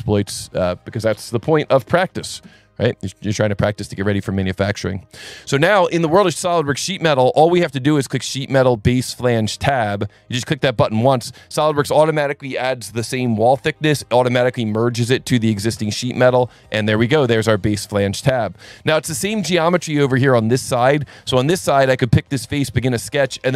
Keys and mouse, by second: 0.0 click, 0.5 click, 2.1 KP_2, 2.3 KP_5, 2.4 KP_Enter, 7.6 click, 10.8 click, 15.8 click, 16.5 click, 21.3 click, 22.4 click.